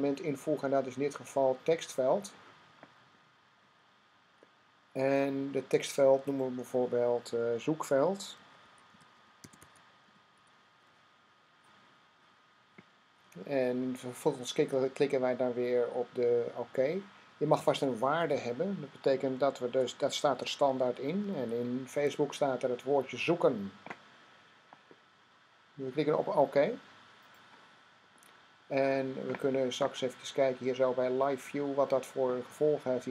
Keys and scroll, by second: 7.8-10.2 typing, 19.5-21.8 typing.